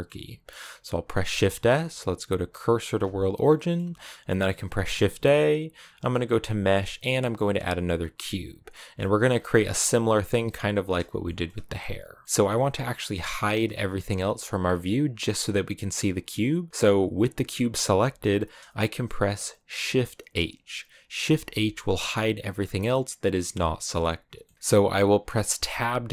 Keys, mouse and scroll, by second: 2.8 shift+s, 3.3-8.4 middle drag, 8.8 shift+middle click, 9.1-10.6 scroll up 3, 10.6-11.1 scroll down 6, 11.1-12.2 shift+middle drag, 12.2-14.5 scroll up 1, 14.5-21.1 scroll up 1, 21.1 shift+h, 22.6-25.5 middle drag, 25.5 Tab.